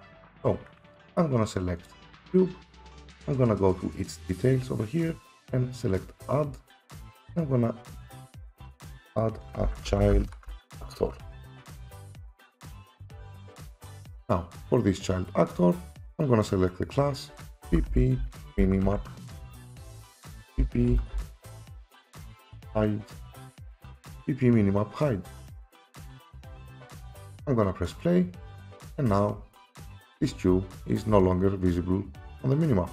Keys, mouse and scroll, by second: 0.4 Escape, 1.9 click, 6.5 click, 9.6-11.2 typing, 9.8 click, 13.0 click, 13.8 click, 14.3 click, 16.9 click, 17.7-18.9 typing, 20.4-23.0 typing, 25.5 click, 28.0 click, 28.9 click, 28.9-31.1 typing.